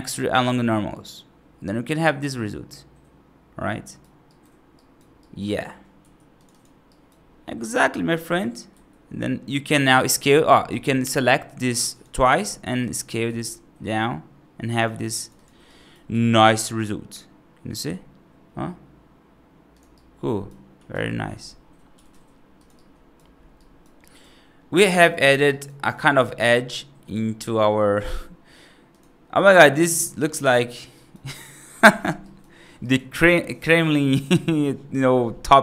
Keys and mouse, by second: 1.5-3.9 right drag, 4.1 right click, 4.6 right click, 5.1 right click, 5.9 2, 6.2 click, 6.4 click, 6.8 right click, 7.6 right click, 8.1 right click, 8.6 s, 11.6 click, 11.8 click, 12.7 right click, 13.1 s, 15.1 click, 15.2 click, 15.5 right click, 16.0 s, 19.8 right click, 20.8 g, 21.8 g, 22.6 right click, 23.4 right click, 23.9 right click, 24.8 right click, 25.4 right click, 25.7 F2, 26.3 right click, 27.9 s, 29.4 right drag, 30.0 right drag, 30.5 right drag, 30.8 right click, 31.2 right drag, 32.1 right drag, 32.7 right drag, 33.4 right click.